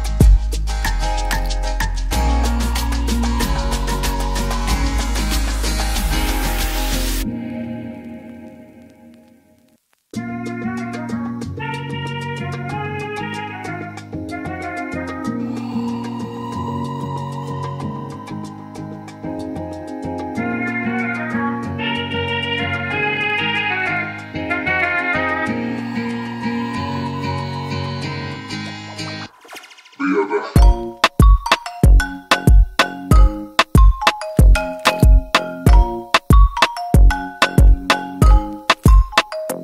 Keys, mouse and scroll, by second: 1.8 click, 20.4 click, 26.2 click, 27.7 click, 30.5 click, 32.6 click.